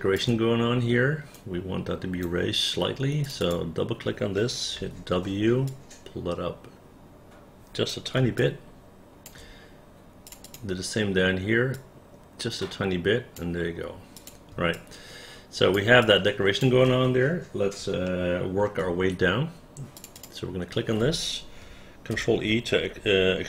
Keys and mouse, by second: 1.5 right click, 3.5 click, 4.9 w, 5.8-8.0 drag, 8.5 alt+click, 10.4 click, 10.6 click, 11.8-13.5 drag, 14.3 click, 14.9-15.9 alt+drag, 16.2 alt+click, 18.2 alt+middle click, 20.1 click, 20.3 click, 22.2 ctrl+e.